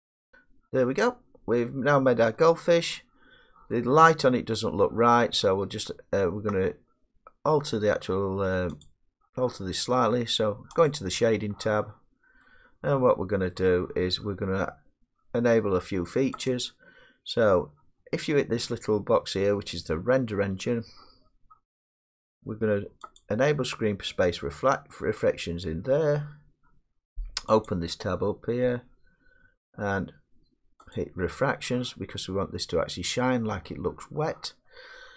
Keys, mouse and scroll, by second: 0.1-4.7 middle drag, 8.9 click, 10.9 click, 13.5 middle click, 16.5 click, 23.2 click, 26.6 scroll down 2, 27.7 click, 31.0 click, 32.4 scroll, 34.1 scroll, 34.4 middle click.